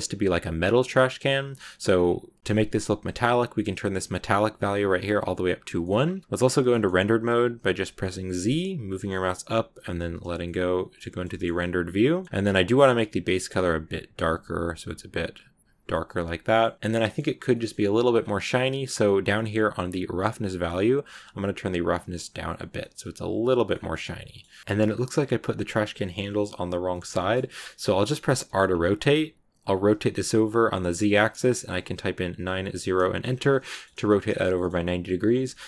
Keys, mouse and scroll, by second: 0.5 scroll down 2, 1.1 scroll down 4, 1.8 scroll down 2, 1.9 scroll up 1, 1.9 scroll down 1, 4.6-5.7 drag, 5.7 middle click, 6.0-6.7 scroll down 1, 6.7-8.3 shift+middle drag, 8.3 z, 10.3-12.6 middle drag, 12.6 click, 15.8-17.9 middle drag, 17.9-20.7 scroll down 8, 20.7-22.6 drag, 22.6 scroll down 1, 22.7 middle click, 23.6 scroll down 2, 23.7 scroll up 1, 23.8 middle click, 24.6-25.2 scroll up 1, 25.2-26.8 scroll down 1, 26.8 shift+middle click, 27.4 scroll down 1, 27.5 middle click, 28.3 r, 33.3 scroll down 2, 33.6 middle click, 33.7-34.1 scroll up 1, 34.1 shift+middle click, 34.6-35.3 scroll up 1, 35.3-35.6 middle drag.